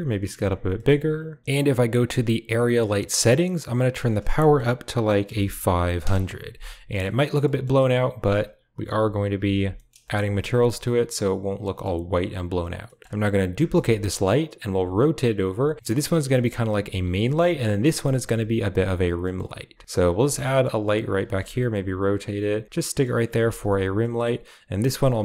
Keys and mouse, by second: 0.0-1.4 typing, 0.7 middle click, 3.8-5.9 drag, 5.4 0, 6.8 middle click, 7.3 middle drag, 8.9 h, 9.6 middle drag, 9.9 shift+middle click, 11.5 middle drag, 12.7 middle drag, 13.6 shift+d, 14.6 r, 15.7 g, 16.2 drag, 16.8 s, 17.1 g, 17.5 click, 17.8 middle drag, 18.2 r, 18.6 g, 19.1 middle drag, 19.5 r, 19.8 click, 20.0 g, 20.3 drag, 21.1-23.6 typing, 22.9 drag, 23.9 drag.